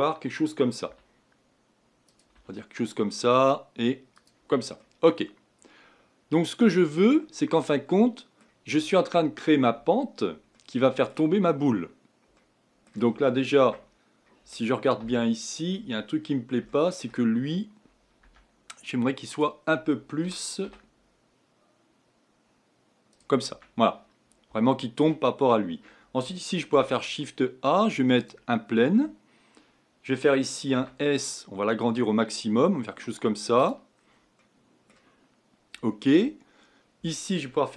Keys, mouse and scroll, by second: 0.9 e, 2.3 e, 4.8-7.4 middle drag, 7.4-8.0 scroll down 2, 8.0-13.6 middle drag, 13.6 Tab, 15.0 KP_1, 16.0-16.7 scroll up 4, 16.7 shift+middle click, 17.3-18.2 scroll up 2, 18.2 Tab, 19.3 click, 20.2 g, 23.5 Tab, 24.2-24.6 scroll down 2, 24.6-26.7 shift+middle drag, 26.7 shift+a, 30.7 s, 33.9-34.4 scroll down 5, 34.4-37.7 middle drag.